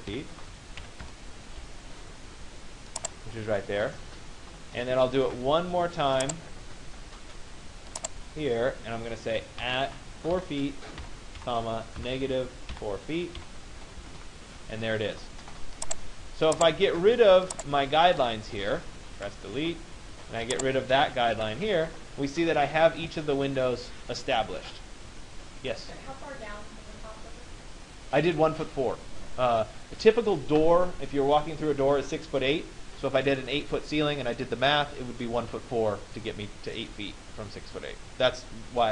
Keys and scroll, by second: 0.6 Return, 13.6 Return, 18.8 Delete.